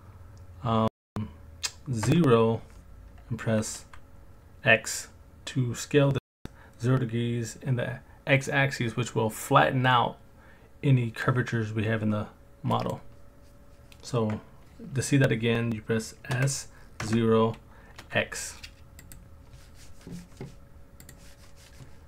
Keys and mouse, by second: 2.1 KP_0, 3.8 x, 12.7 click, 16.3 s, 17.0 KP_0, 18.0 x, 19.0 click.